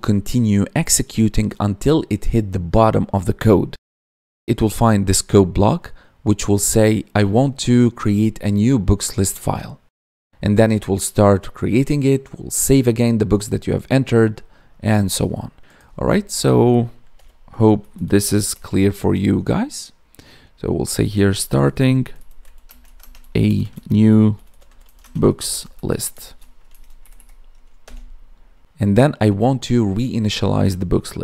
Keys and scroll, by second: 22.6 space, 22.9 space, 23.6 space, 24.9 space, 26.6 ctrl+s, 26.9 Right.